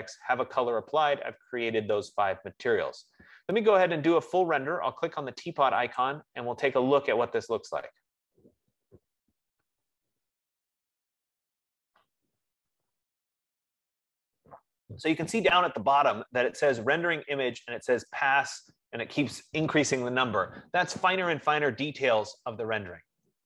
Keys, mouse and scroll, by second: 6.2-11.3 drag.